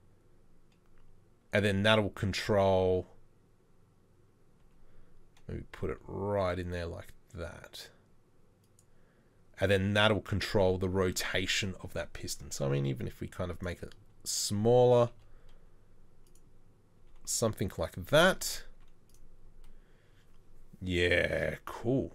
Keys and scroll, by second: 4.7 g, 12.7 s, 15.2 s, 15.2 r, 17.0 g, 18.8 z.